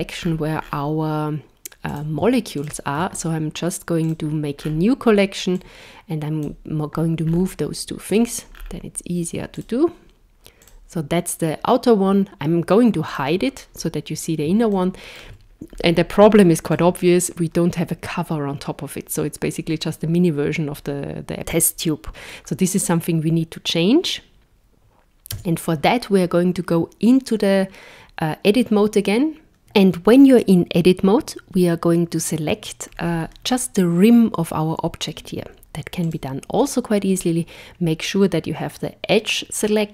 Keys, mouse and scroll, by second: 1.8 click, 2.6 shift+click, 4.0 click, 4.6-4.9 scroll down 6, 5.5 click, 7.3 scroll up 5, 8.1 click, 8.5 scroll down 4, 9.5 click, 10.6 click, 13.1 click, 14.7 shift+middle click, 15.7-16.1 scroll up 4, 16.4 shift+middle click, 22.7 click, 25.3 Tab, 32.9-36.0 scroll up 4, 36.0 click.